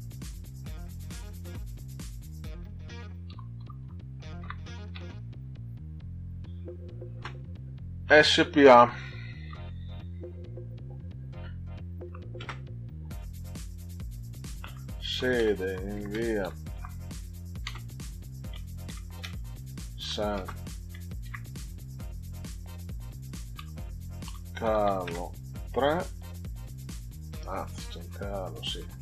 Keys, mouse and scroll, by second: 3.0-4.9 typing, 7.1 space, 8.0 s, 8.5 p, 9.4 a, 12.0 ., 12.4 space, 14.2-17.6 typing, 18.8 shift+s, 23.5 a, 24.2 r, 24.8 o, 25.5 3, 27.5 BackSpace.